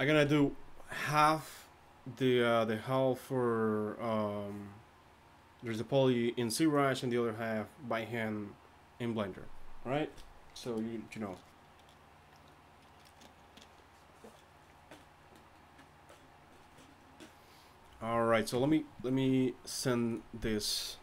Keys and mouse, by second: 0.1 z.